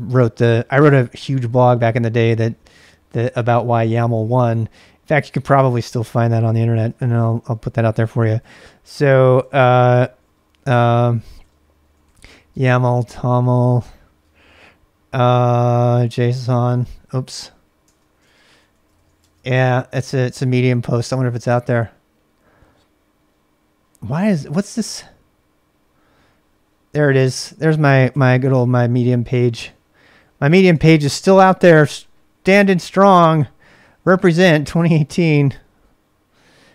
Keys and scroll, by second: 5.3-14.2 typing, 15.7-19.5 typing, 21.0 space, 27.1-28.1 typing, 29.6 typing, 30.7 super+Tab.